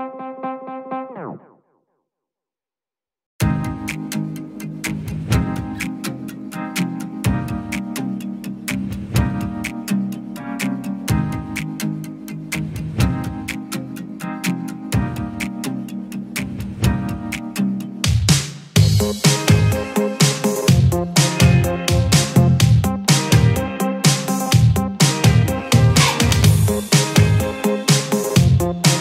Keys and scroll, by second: 13.2 ctrl+g, 18.1 ctrl+z, 21.6 ctrl+a, 25.1 ctrl+a.